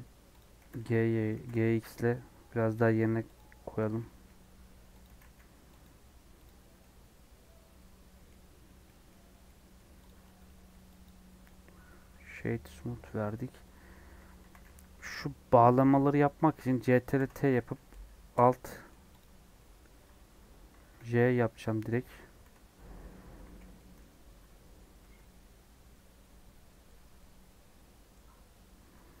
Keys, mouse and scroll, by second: 0.3 click, 0.6 g, 1.3 g, 3.8 s, 6.4 click, 6.6 scroll down 4, 6.7-8.5 middle drag, 8.5-9.4 scroll up 5, 8.8 middle click, 9.4 middle click, 10.0 click, 11.0-12.1 right drag, 12.1 Tab, 12.6 scroll up 1, 13.1 scroll down 2, 14.4 a, 14.8 scroll up 1, 15.8 scroll down 1, 17.1 ctrl+t, 17.9 space, 19.5-21.0 middle drag, 21.0 alt+h, 21.6 middle click, 22.0 alt+j, 22.5 Tab, 23.4 /, 23.7 middle click, 24.2 Tab, 24.4 middle click, 24.9 3, 25.1-26.9 middle drag, 26.9 Tab, 27.1-29.2 middle drag.